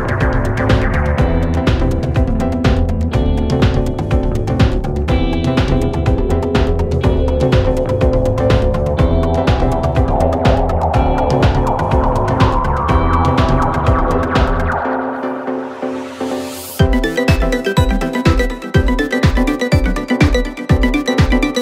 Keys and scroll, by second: 3.3 4, 6.3 2, 9.5 4, 11.6 3, 16.3 4, 17.0 3, 18.0 ], 20.1 4.